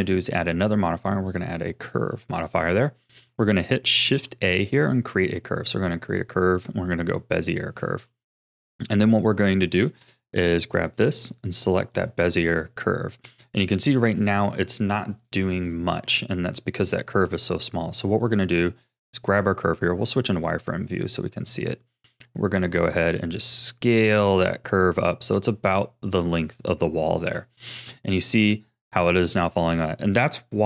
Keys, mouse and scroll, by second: 0.2-2.3 drag, 2.3-4.0 shift+middle drag, 4.0 shift+a, 7.8-9.9 shift+middle drag, 9.9 click, 11.3-14.5 drag, 19.0 click, 19.7 z, 22.1 s, 26.8-30.0 shift+middle drag.